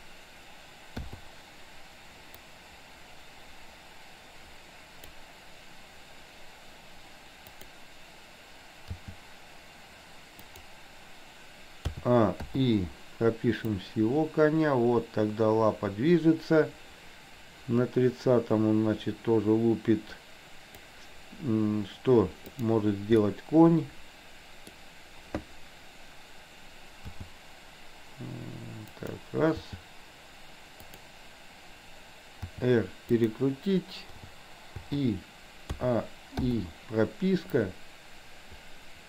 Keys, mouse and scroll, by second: 1.1 i, 2.6-5.3 drag, 7.6 click, 8.8 g, 12.0 a, 12.5 i, 13.8-21.0 drag, 22.6 click, 23.2-24.8 middle drag, 27.1 g, 29.6 g, 32.6 r, 34.3 i, 34.8 i, 35.7 a, 36.5 i, 37.7-39.0 drag.